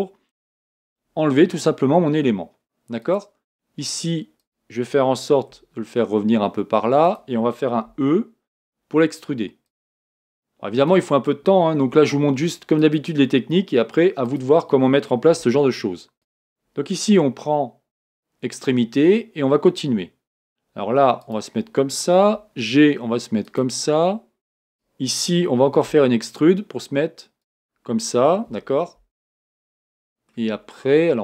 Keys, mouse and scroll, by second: 0.6 g, 4.4 click, 5.6 g, 7.9 e, 10.9 click, 11.9 g, 14.2-15.3 drag, 15.3 g, 16.2 click, 18.7 e, 21.2 click, 22.3 g, 24.7 click, 25.9 e, 28.8-29.4 scroll down 4, 29.4-29.9 scroll up 3, 29.9 middle click, 30.3 scroll down 1, 30.6 scroll up 1.